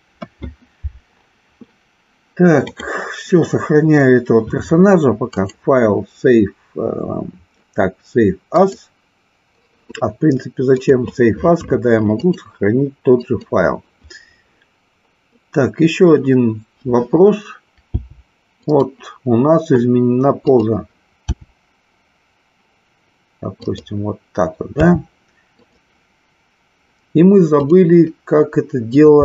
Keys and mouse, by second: 0.0 KP_1, 2.5 click, 5.3-9.0 drag, 12.2-13.4 drag, 18.0 g, 18.8 click, 21.9 g, 24.7 r, 27.5-28.8 drag.